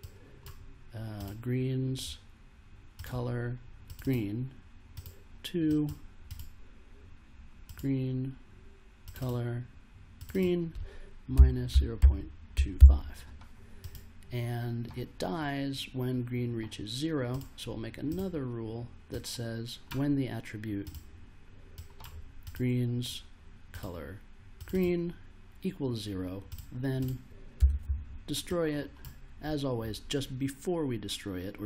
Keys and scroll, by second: 11.1-13.2 typing, 27.3-28.3 typing.